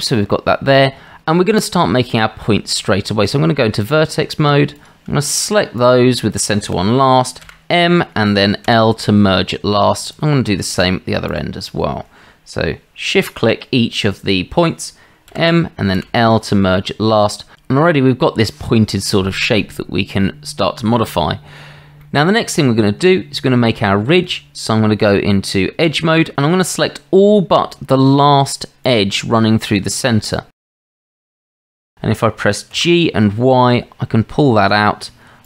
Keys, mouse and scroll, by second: 0.2 shift+click, 1.8 Tab, 4.8 click, 5.3 shift+click, 7.4 m, 10.1 click, 10.8 shift+click, 16.0 m, 22.0-22.3 shift+middle drag, 23.1-24.0 drag, 24.3 Tab, 28.8 shift+click, 30.3 shift+click, 31.1 shift+click, 31.4-31.9 middle drag, 32.8 g.